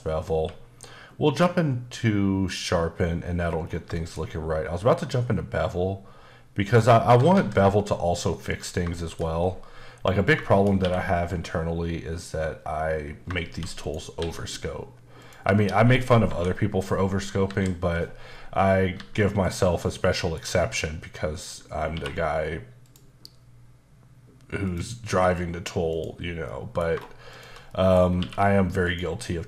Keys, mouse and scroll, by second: 0.0-0.3 scroll down 2, 0.3 q, 2.4 click, 3.6 scroll down 2, 3.9 shift+middle click, 6.7 click, 7.0 typing, 8.9 shift+middle click, 9.3-10.3 scroll up 1, 10.4 shift+middle click, 10.8 q, 13.5 shift+d, 13.8 right click, 14.2 s, 15.2 click, 16.3 KP_7, 18.9 g, 19.4 click, 19.8 middle click, 21.4 click, 21.8-22.8 scroll up 2, 21.9 q, 24.6 click, 25.9 click, 26.5 middle click, 27.3 shift+click, 27.7 middle click, 28.0 scroll up 1, 28.2 q, 28.8 click, 29.2 middle click.